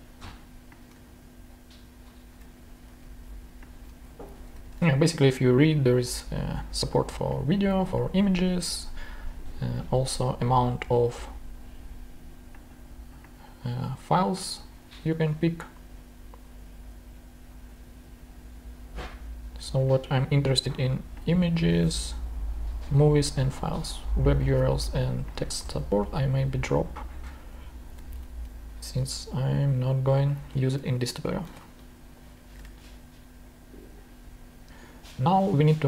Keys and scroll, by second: 1.0 shift+super+c, 1.5 super+c, 2.2 super+Tab, 2.8 super+v, 4.1 super+Left, 4.5 super+BackSpace, 4.7 super+Tab, 25.6 super+Tab, 27.7 super+Left, 28.1 shift+Down, 30.8 shift+BackSpace, 31.2 shift+Up, 31.4 shift+Down, 31.6 shift+BackSpace, 32.5 super+Tab.